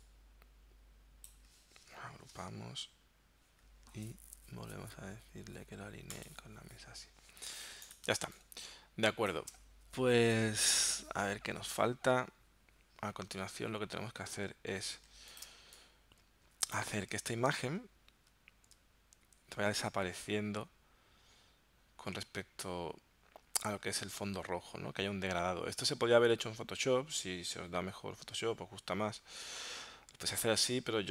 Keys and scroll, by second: 2.3 super+g, 8.1 space, 15.1 z, 15.5 space, 17.2 v, 17.7 super+Tab.